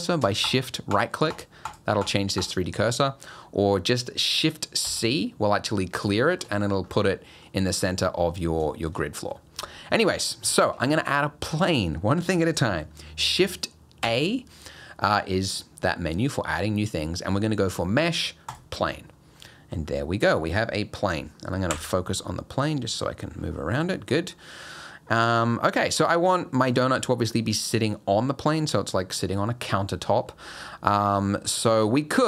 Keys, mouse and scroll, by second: 0.5 shift+right click, 1.0 shift+right click, 1.4 shift+right click, 1.7 shift+right click, 2.1 shift+right click, 2.5 shift+right click, 4.9 shift+c, 6.2 shift+middle click, 6.6-7.1 scroll up 8, 7.1 middle click, 8.7 shift+middle click, 9.8 middle click, 10.5 shift+scroll up 1, 10.5 shift+middle click, 14.0 shift+a, 19.2 scroll up 1, 19.4 middle click, 19.8 scroll down 3, 21.7 KP_Decimal, 22.3 middle click, 23.3-23.6 scroll up 5, 23.8 middle click, 24.1 scroll up 2, 24.4 middle click, 24.8-25.2 scroll up 4, 25.4 middle click, 27.3 middle click, 30.9 click, 31.3 middle click, 31.7 click.